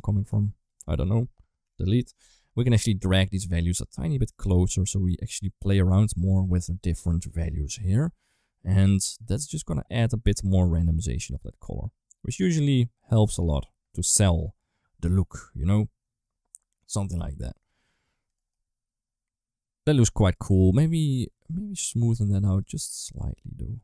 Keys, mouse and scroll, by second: 0.1 g, 1.5 Delete, 2.8 click, 4.1-6.3 drag, 6.6 middle click, 7.1 click, 8.0 click, 17.0 middle drag, 18.2 middle drag, 20.2 drag, 21.6 click, 22.8-23.8 drag.